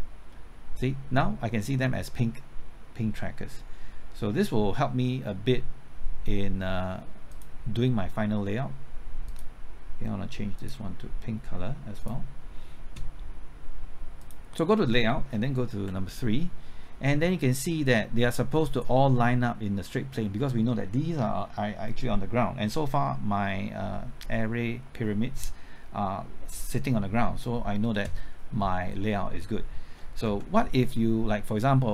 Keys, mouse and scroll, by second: 15.8 KP_3, 30.3 KP_0.